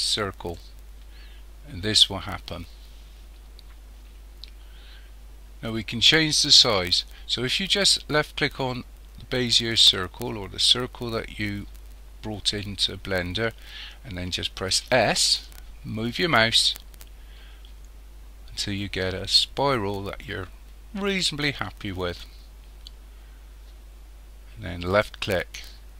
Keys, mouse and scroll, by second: 9.4 click, 14.7 s.